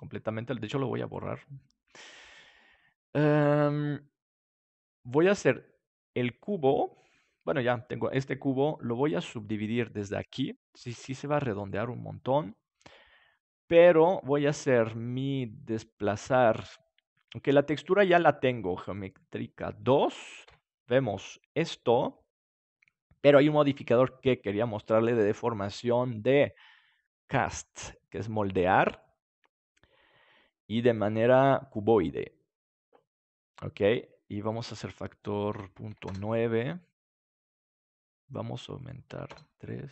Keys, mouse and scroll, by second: 0.8 Delete, 1.9-3.5 right drag, 8.5-10.2 drag, 11.2-16.2 drag, 17.5-19.4 drag, 20.4 KP_Decimal, 21.1-23.9 middle drag, 23.9-29.4 drag, 30.8-33.4 drag, 34.4-36.7 drag, 38.7-39.9 drag.